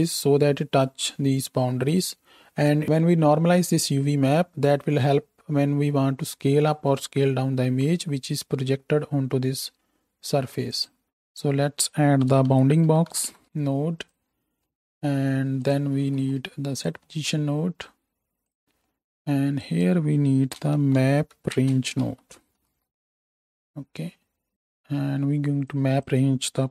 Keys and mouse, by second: 2.8-11.3 right drag, 11.3-14.0 middle drag, 14.0-17.8 right drag, 16.0 shift+d, 17.8-24.5 middle drag, 24.5-25.7 right drag.